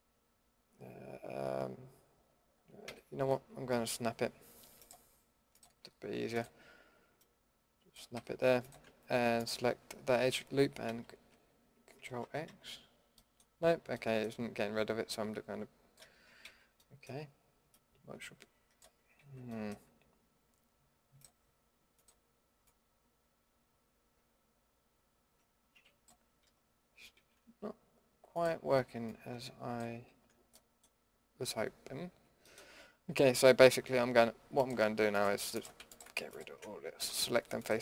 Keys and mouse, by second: 2.8 a, 8.1 a, 10.9 ctrl+x, 11.9 ctrl+x, 12.2 ctrl+x, 12.5 ctrl+x, 16.4 ctrl+z, 19.2 ctrl+z, 27.2 ctrl+z, 30.1 ctrl+z, 37.0 Delete.